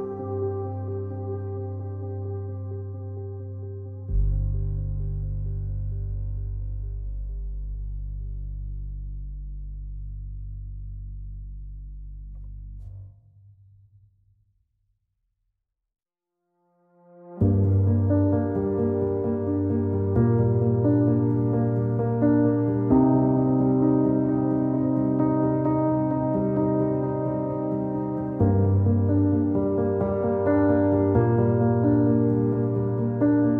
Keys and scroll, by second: 7.6 w.